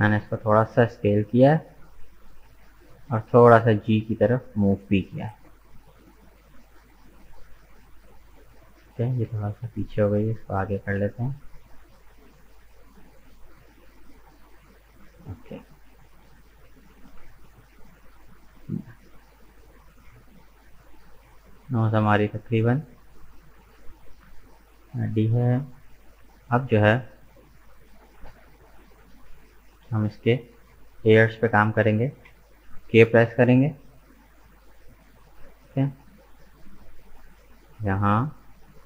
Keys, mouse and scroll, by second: 0.5-3.5 middle drag, 3.7-6.7 middle drag, 9.2 g, 14.8-16.2 middle drag, 16.2 Tab, 16.4 right click, 16.7 scroll down 3, 17.0-19.3 middle drag, 19.3-19.6 scroll down 1, 19.6 middle click, 20.4-21.0 scroll up 2, 21.6-24.6 middle drag, 24.9 middle click, 25.6 right click, 25.9 Tab, 26.2 middle click, 26.9 right click, 27.4-32.2 middle drag, 32.2 k, 33.1-36.2 middle drag.